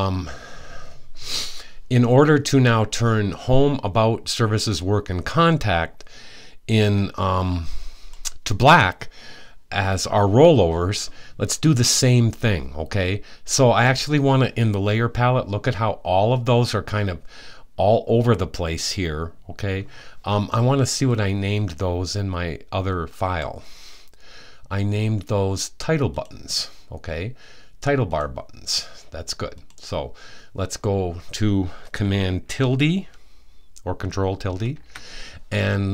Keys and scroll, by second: 34.1 super+`.